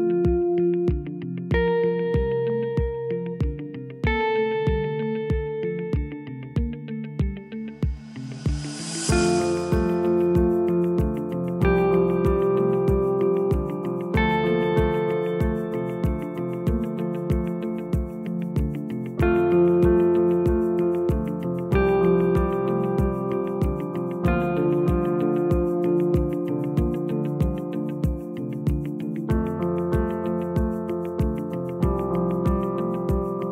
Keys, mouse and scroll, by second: 0.7 click, 1.5 click, 3.7 shift+click, 5.0 Delete, 7.2 click, 7.9-9.8 scroll up 2, 9.8 click, 11.5 click, 12.9 click, 13.9 g, 15.3 click, 15.9 g, 17.6 click, 17.9 g, 20.9 click, 21.2 g, 22.9 alt+shift+click, 23.3-24.1 scroll down 2, 24.1 scroll down 1, 24.2-27.3 scroll up 1, 29.0 click, 30.1 e, 32.9 click.